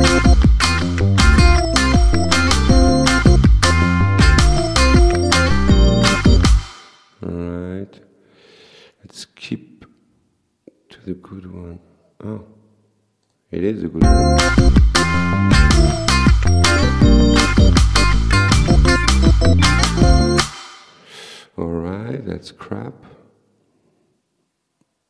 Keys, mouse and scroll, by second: 6.6 space, 6.9 click, 13.3 click, 14.0 space, 20.4 space, 20.7 click, 21.0 right click.